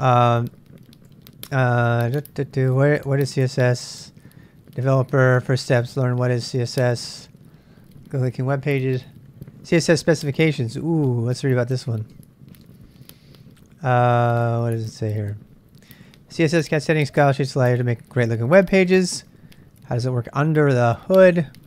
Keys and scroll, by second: 1.7 j, 5.0 k, 12.1 space, 13.7 ctrl+n, 14.1 ctrl+n, 21.1 ctrl+n.